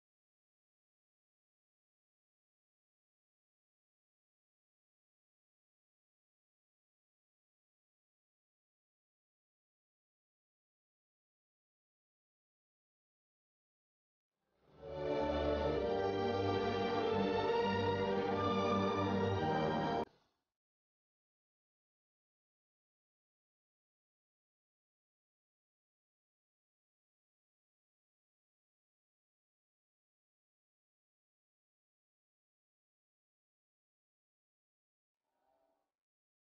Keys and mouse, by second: 0.3-7.1 drag, 0.3 middle click, 0.7 right click, 3.9-7.1 middle drag, 9.4-11.1 middle drag, 11.1-12.9 drag, 11.1-12.9 right drag, 12.9 middle click, 12.9 Tab, 18.8 Tab, 18.8-20.9 right drag, 20.9-22.9 drag, 22.9 KP_7, 23.7 Tab, 25.5 g, 26.3 KP_0, 27.1 g, 30.7-36.1 middle drag, 36.1 click.